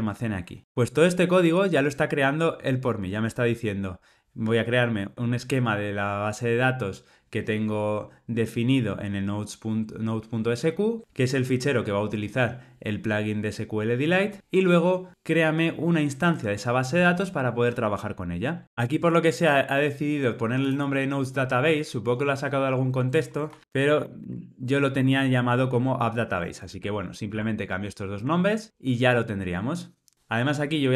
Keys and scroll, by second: 24.9 Tab, 26.6 super+c, 27.3 super+v.